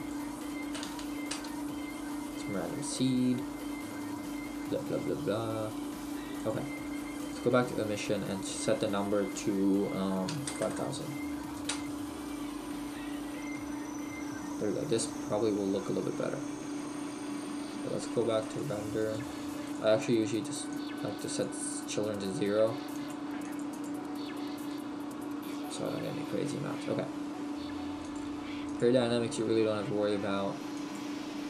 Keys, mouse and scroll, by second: 1.5 click, 14.1 middle click, 21.5 click, 24.8 middle click, 26.2 scroll down 1, 30.9 click.